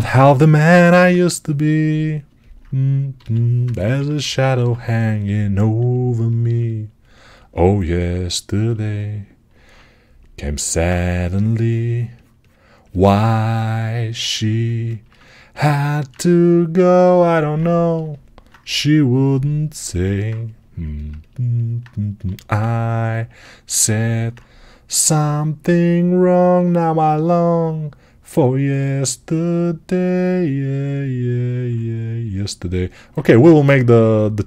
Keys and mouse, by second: 0.1 6, 0.6 [, 3.0 g, 3.5-6.9 right drag, 3.5-6.3 ], 6.9 ctrl+alt+click, 7.4-8.6 alt+right drag, 8.6 alt+click, 8.9 alt+right click, 8.9-13.6 alt+drag, 10.8 2, 13.6 shift+right click, 13.8-17.4 shift+drag, 15.1 ctrl+alt+right click, 17.4-20.7 right drag, 18.5 3, 22.1 g, 23.7-34.4 ctrl+alt+right drag.